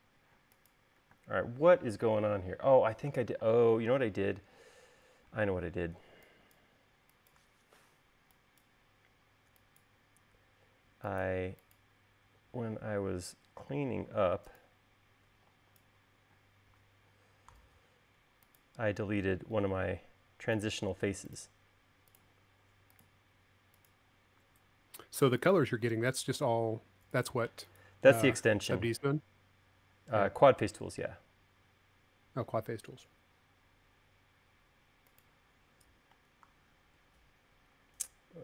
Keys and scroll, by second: 1.7 space, 3.2 q, 3.9 space, 6.5 e, 12.9 l, 14.1 e, 16.8 l, 36.7 l.